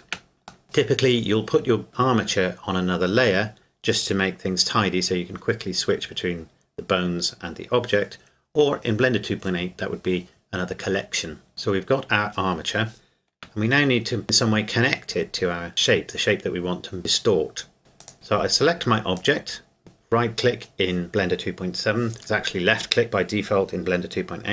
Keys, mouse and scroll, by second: 0.6 middle click, 11.5-13.3 scroll down 1, 13.3-14.9 scroll down 1, 14.9 Tab, 15.7 right click, 18.0 right click, 18.1 Escape, 19.2 right click.